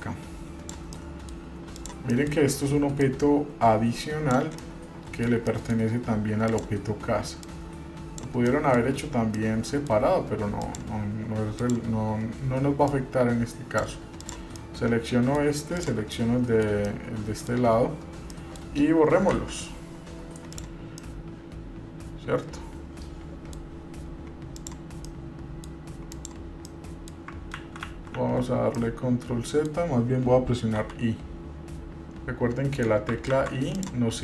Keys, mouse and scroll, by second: 0.2 click, 1.1 middle click, 1.9 click, 2.3 middle click, 3.2-4.7 drag, 4.8 middle click, 5.8 middle click, 6.7 click, 7.6 click, 8.7 middle click, 9.5 middle click, 10.8 click, 11.8 click, 13.0-14.0 drag, 14.4 click, 14.8 middle click, 16.0 shift+click, 16.3 shift+middle click, 17.1 middle click, 17.9-18.6 scroll up 3, 18.3 middle click, 19.5 Delete, 21.2-23.7 middle drag, 24.8 click, 25.2 middle click, 26.3 click, 26.9 middle click, 27.8 ctrl+z, 28.0 ctrl+z, 28.3 ctrl+z, 29.0 middle click, 33.7 ctrl+z, 33.9 click.